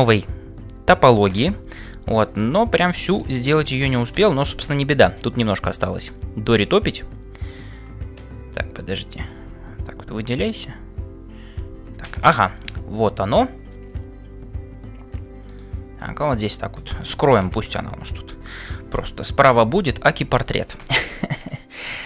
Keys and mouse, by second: 1.9 KP_Divide, 3.7 ctrl+s, 6.8-8.5 drag, 8.5 c.